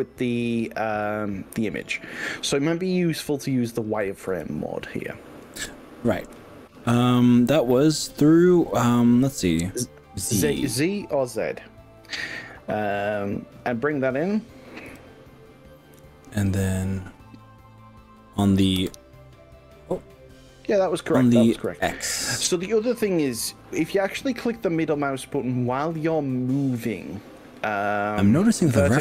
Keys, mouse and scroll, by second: 0.3 click, 4.3 KP_1, 10.3 z, 12.9 click, 13.3 click, 14.9 g, 18.8 y, 21.7 x.